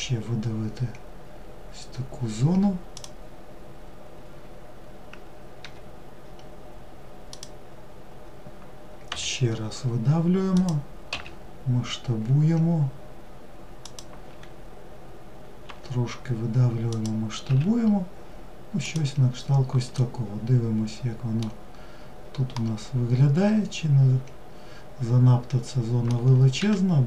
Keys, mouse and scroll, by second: 18.7-20.7 middle drag, 20.7-21.3 scroll down 1, 21.3-24.4 middle drag, 25.9 click.